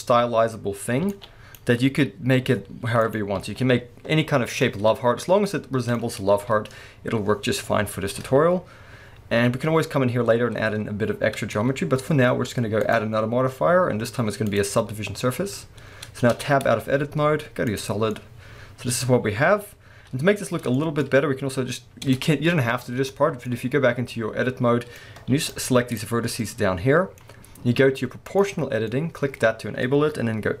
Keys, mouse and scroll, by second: 1.0 b, 3.1 middle click, 3.1 click, 3.4 alt+a, 4.4-12.8 middle drag, 4.4 scroll down 2, 6.4 KP_1, 7.9-10.3 scroll up 2, 10.3-12.0 scroll up 1, 12.8-18.1 drag, 15.2-16.3 scroll down 2, 16.3 Tab, 16.9 z, 18.1-28.3 middle drag, 22.1 Tab, 22.5-23.4 scroll up 2, 25.3 b, 28.3 click, 28.4-30.6 middle drag.